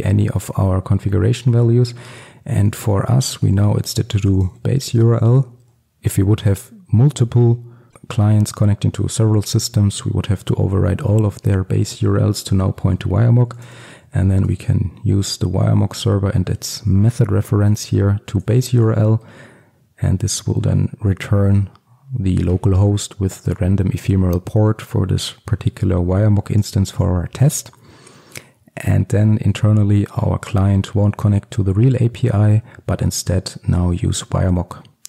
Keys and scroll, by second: 14.6 Return.